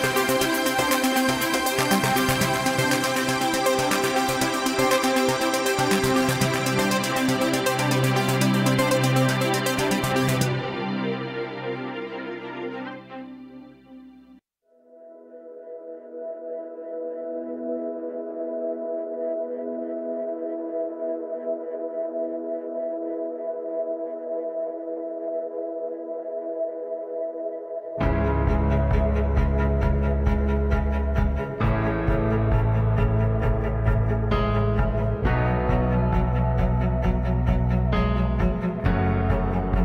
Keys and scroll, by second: 2.4 g, 2.9 g, 3.6 g, 5.8 g, 7.3 e, 8.0 e, 12.0 w, 14.8 g, 15.4 g, 22.5 ctrl+a, 23.1 ctrl+a, 24.0 ctrl+a, 25.0 ctrl+a, 25.8 ctrl+a, 26.1 ctrl+a, 26.8 a, 27.7 ctrl+a, 28.4 ctrl+a, 29.1 ctrl+a, 29.3 ctrl+a, 29.9 ctrl+a, 31.4 s, 31.8 ctrl+a, 32.2 ctrl+a, 32.8 ctrl+a, 33.3 ctrl+a, 33.8 ctrl+a, 34.3 a, 35.4 ctrl+a, 36.1 a, 37.2 ctrl+a, 37.9 ctrl+a, 38.3 ctrl+a.